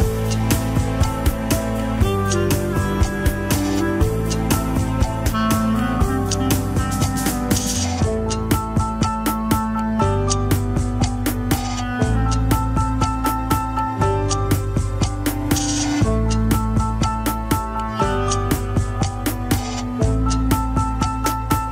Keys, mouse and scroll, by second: 0.0 ctrl+s, 2.5 scroll down 2, 2.8 alt+z, 3.6 ctrl+Tab, 3.7-4.3 middle drag, 4.3 click, 4.6 scroll down 1, 4.8-5.3 shift+middle drag, 5.3 shift+click, 6.0 middle click, 6.6 m, 7.8 KP_1, 8.0 scroll down 3, 8.4 alt+z, 8.8 ctrl+Tab, 9.0 alt+z, 9.2-9.7 scroll down 2, 9.7 shift+z, 10.3 scroll down 4, 10.9-16.4 drag, 18.0 click, 18.5 click, 18.8 shift+middle drag, 19.0 scroll down 2, 19.7 ctrl+s, 20.2 shift+click, 20.4 scroll up 3, 20.8 ctrl+Tab, 21.1 alt+z, 21.6-21.7 scroll up 5.